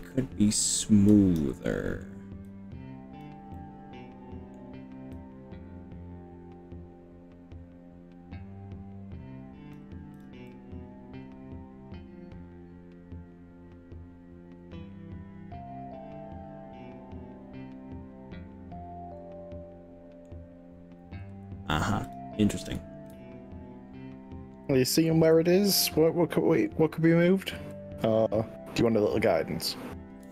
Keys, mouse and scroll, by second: 1.1 click, 1.6 middle click, 2.5 click, 3.5-4.6 middle drag, 5.2 click, 10.2 click, 10.5-20.3 middle drag, 20.8-21.4 scroll up 3, 22.0 click, 23.2 z, 25.6-26.7 middle drag, 27.6 g, 28.8 scroll up 2, 29.8 click.